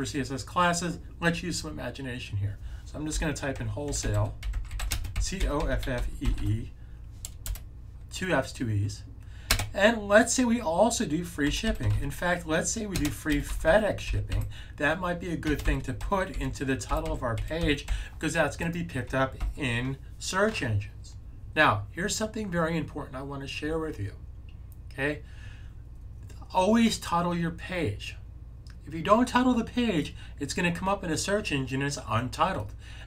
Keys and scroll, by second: 2.7-7.3 typing, 11.1-19.7 typing.